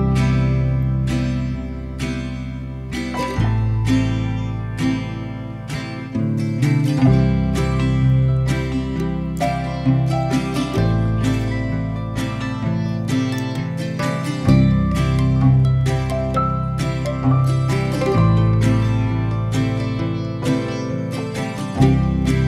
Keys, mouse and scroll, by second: 0.0 middle click, 0.7 Tab, 2.7-5.7 drag, 5.7-6.7 right drag, 6.7-7.8 middle drag, 7.8 click, 8.5 shift+click, 9.4 ctrl+l, 10.4 ctrl+l, 10.8-11.2 middle drag, 11.2 click, 12.3 Tab, 13.4 a, 14.4-15.6 drag, 15.6 Tab, 16.2-17.1 right drag, 17.1 middle click, 18.0 click, 18.2 middle click, 18.3 click, 18.8-21.8 middle drag, 21.8 click.